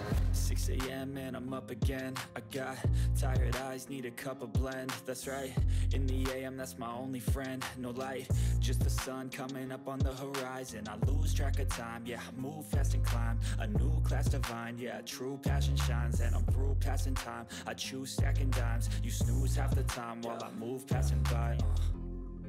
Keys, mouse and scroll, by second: 3.3-5.5 drag, 7.8 right click, 8.7 click, 13.5 click, 14.1-15.0 typing, 18.1 click, 19.7 click, 20.3 click, 20.6-21.1 scroll up 1, 21.1 click, 21.2-22.4 typing.